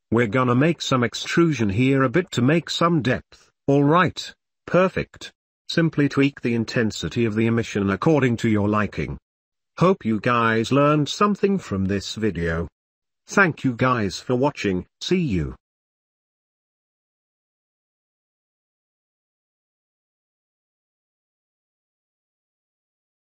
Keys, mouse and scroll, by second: 0.2 Tab, 0.4 Tab, 0.6 click, 0.6 middle click, 1.4 middle click, 1.4 n, 1.7 click, 2.6 shift+middle click, 3.2 e, 4.2-5.5 drag, 4.8 middle click, 5.0 middle click, 5.7 shift+click, 6.5 middle click, 6.7 Tab, 7.1-8.4 drag, 8.4-9.0 middle drag, 9.6 click, 10.0 shift+middle drag, 10.3 shift+click, 11.9-14.7 shift+middle drag, 22.1 shift+click, 22.9 ctrl+middle click.